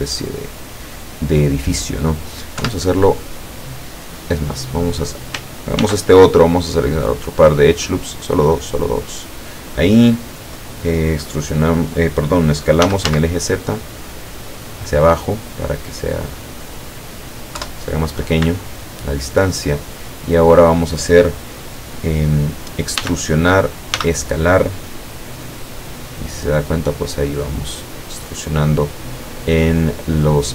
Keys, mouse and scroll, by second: 0.3-1.8 drag, 2.7 KP_7, 3.8-5.1 drag, 5.8 ctrl+r, 6.7-7.3 scroll up 4, 8.0 scroll down 2, 8.6 click, 9.3 click, 12.8 s, 13.1 z, 16.6 click, 17.6 KP_7, 18.7-20.7 shift+middle drag, 23.1 e, 24.0 s, 27.4 click, 27.9-29.3 middle drag, 29.3 scroll down 2, 29.7-30.5 middle drag.